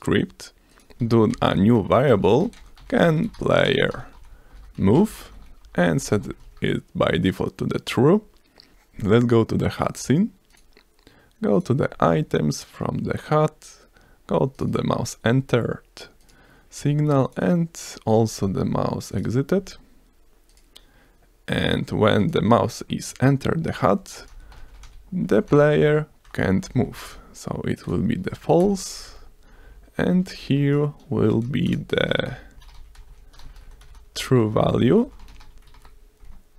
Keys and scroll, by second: 1.4-6.1 typing, 2.1 Return, 6.4 ctrl+s, 8.7 F1, 24.1-25.4 typing, 26.2 Return, 26.5 space, 26.7 space, 26.8 f, 26.9 a, 27.8 Return, 28.2 Down, 28.6 BackSpace, 28.9 Down, 31.3-35.4 typing, 34.4 Return, 35.7 ctrl+s.